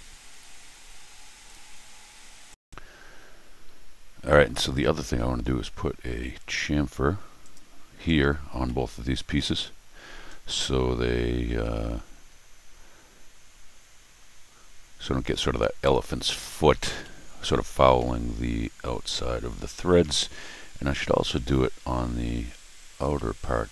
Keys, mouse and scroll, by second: 1.5 click, 2.6 click, 7.4 click, 8.1 scroll down 2, 8.6 middle click, 9.3 middle click, 9.8-10.3 scroll up 2, 10.3-11.0 scroll down 4, 12.3-12.8 scroll up 2, 14.0 scroll up 2, 17.0 middle click, 17.9 middle click, 19.0-19.5 scroll up 2, 19.5 scroll down 1, 19.6 middle click, 19.9-22.2 middle drag, 23.0 middle click.